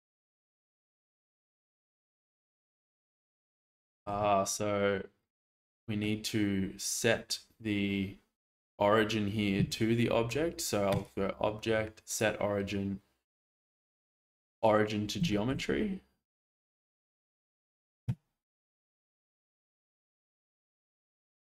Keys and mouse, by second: 3.7-4.0 shift+middle drag, 4.2-6.0 middle drag, 10.9-14.6 drag, 15.3 shift+middle click, 15.7-16.9 middle drag, 17.5 shift+middle click.